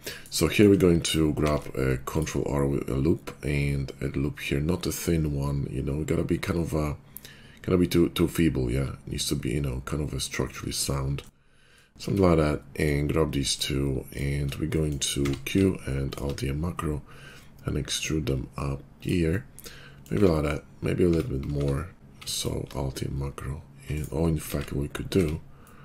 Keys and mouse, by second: 0.0-1.0 shift+drag, 1.2 ctrl+r, 4.3-12.0 drag, 12.0 Tab, 14.9-22.6 drag, 15.1 q, 20.1 Tab, 20.9 Tab, 21.4 q, 23.8 click, 23.9 middle click, 24.4 ctrl+z, 25.1 Tab.